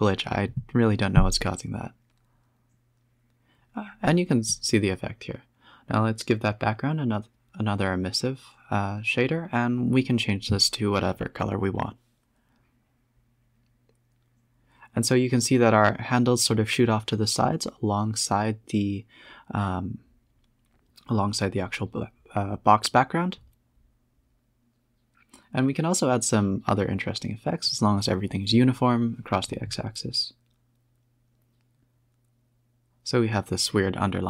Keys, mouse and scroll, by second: 0.2 scroll down 14, 1.5 F12, 2.5 scroll down 3, 2.7 space, 3.7 space, 3.7 click, 4.5 click, 5.3-6.3 drag, 12.4 a, 12.5 scroll up 3, 13.5 space, 17.1 space, 17.2 click, 17.4 Tab, 17.8-18.5 scroll down 1, 18.5-19.9 typing, 22.1 e, 23.2 click, 23.8 Tab, 24.2 Tab, 25.0 shift+click, 25.5 g, 26.5 Tab, 26.8 space, 28.0 z, 28.6 a, 28.7 a.